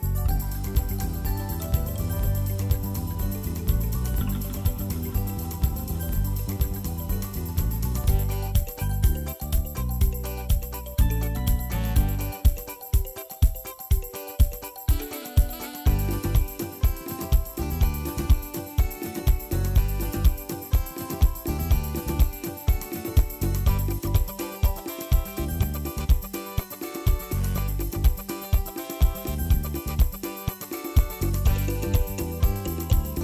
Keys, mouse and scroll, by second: 0.0-0.3 typing, 0.1 scroll down 1, 1.1-2.3 drag, 2.3 ctrl+a, 2.6 shift+middle click, 2.8 scroll up 1, 2.8-3.7 right drag, 3.7-4.9 drag, 4.9 right drag, 5.2-5.8 middle drag, 5.8 KP_1, 5.8-6.6 scroll down 2, 6.6 s, 7.4 scroll up 1, 7.7 shift+middle click, 7.9 g, 8.6 scroll down 1, 8.8 shift+middle click, 9.1 ctrl+s, 9.2 shift+middle click, 9.7 shift+d, 10.9 g, 11.7 s, 12.8 shift+middle click, 13.0 Tab, 13.2 1, 13.4 alt+z, 13.6 click, 14.0 alt+z, 14.2 shift+middle click, 14.4 g, 17.5 ctrl+r, 18.1 s, 20.3 alt+z, 20.4 click, 20.9 s, 22.6 click, 22.8 s, 23.3 Tab, 23.4 alt+z, 24.1 ctrl+a, 24.5 middle click, 24.6-25.1 scroll up 1, 25.1 ctrl+2, 25.4 KP_1, 26.1 ctrl+s, 26.3 middle click, 26.8-27.5 scroll down 4, 26.9 KP_1, 27.5 shift+middle click, 27.6-28.7 scroll up 4, 27.8 shift+middle click, 28.1 click, 28.2 shift+middle click, 28.3 Tab, 28.5 shift+middle click, 28.7 alt+z, 29.0 click, 29.3 alt+z, 29.4-30.3 scroll down 2, 30.3 click, 30.5 s, 32.8 Tab, 33.1 ctrl+s.